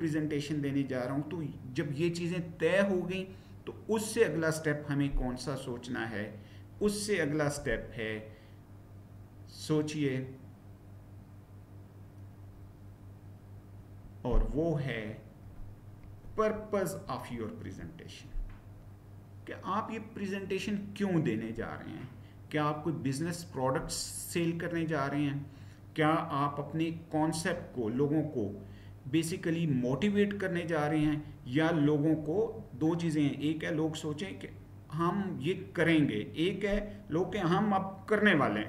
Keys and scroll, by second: 7.5 Right, 13.7 Right, 15.9 Left, 17.1 Down.